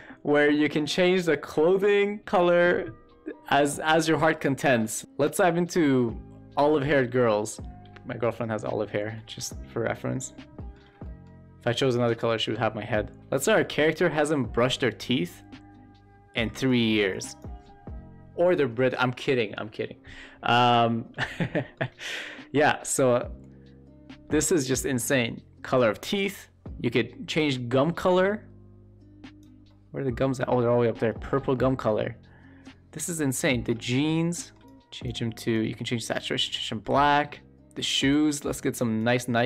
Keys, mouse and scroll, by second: 3.8 shift+middle drag, 9.0 middle click, 10.5 shift+middle drag, 10.9 middle drag, 14.5 click, 20.7 middle click, 21.3 shift+click, 21.4 shift+middle click, 22.2 shift+middle click, 27.2 click, 29.6-30.1 middle drag, 33.8 shift+middle drag, 34.3 shift+middle drag, 36.5 middle drag, 36.8 shift+middle drag, 37.9 click.